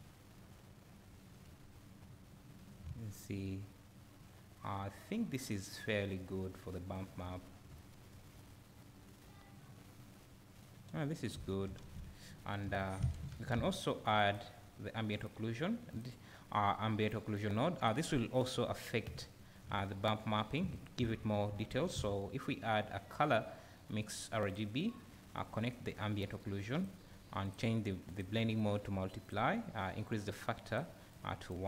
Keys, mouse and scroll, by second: 1.5 `, 6.9 right click, 7.9 `, 8.0 right click, 31.1 click.